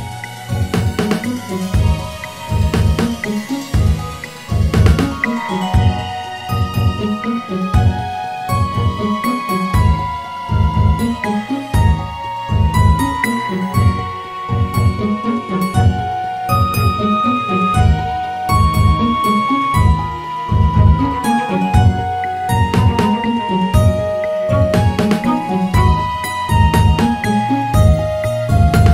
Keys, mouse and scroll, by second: 1.9 Tab, 3.8 click, 5.8-7.3 scroll up 1, 7.6 s, 11.6 Tab, 12.5-13.7 scroll up 1, 14.3 click, 15.2 alt+shift+click, 16.5 s, 22.8 click, 23.5 alt+shift+click, 24.5 s.